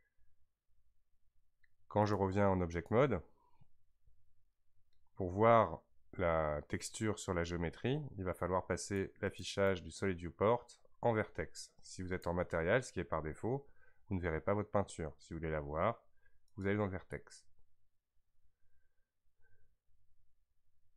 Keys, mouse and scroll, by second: 2.0-5.1 drag, 8.8 click, 9.5-12.7 drag.